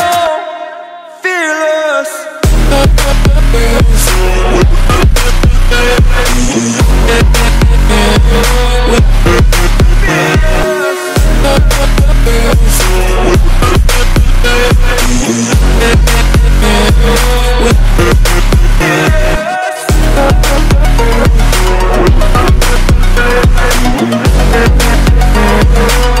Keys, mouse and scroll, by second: 0.0 click, 1.4 scroll down 1, 1.6 scroll up 1, 2.5-5.1 drag, 5.1 scroll down 1, 5.4 scroll up 1, 5.9-8.6 drag, 8.6 scroll down 1, 9.0 scroll up 1, 10.0 click, 11.2-11.5 scroll down 1, 11.5-12.0 scroll up 1, 12.1-14.0 drag, 14.0-14.4 scroll down 1, 14.4-14.7 scroll up 1, 15.7-17.4 drag, 17.4 scroll down 1, 17.8-18.3 scroll up 1, 19.1-20.6 drag, 21.6-22.0 scroll down 1, 22.0 scroll up 1, 22.5-24.0 drag, 24.0 scroll down 1, 24.4-25.0 scroll up 1, 25.1-26.2 drag.